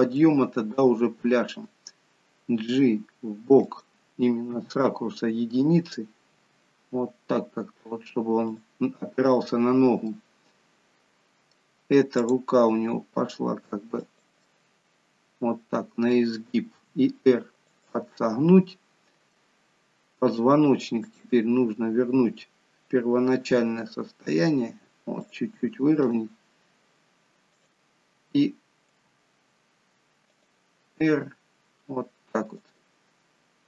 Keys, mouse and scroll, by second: 0.0 middle click, 2.6 g, 4.4 KP_1, 6.2 g, 9.9 middle click, 12.3 click, 12.6 g, 14.3 middle click, 16.8 r, 18.1 middle click, 20.9 click, 23.3 r, 25.9 click, 27.5 click, 28.9 g, 30.8 r.